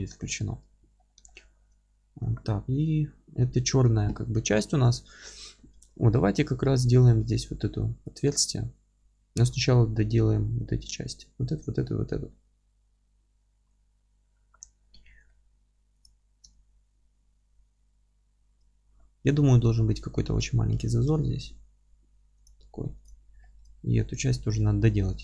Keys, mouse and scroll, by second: 0.3 scroll up 1, 0.5 Tab, 8.2 alt+q, 14.8-15.3 scroll up 2, 15.3-16.0 scroll down 2, 16.0 click, 16.1 z, 16.5-22.4 alt+middle drag, 20.3-20.7 scroll up 1, 20.7 g, 22.4 click, 22.6-23.0 scroll down 1, 23.0 click, 23.1 alt+q, 23.4-25.2 alt+middle drag, 23.7 scroll up 1, 24.0 Tab, 25.0 2.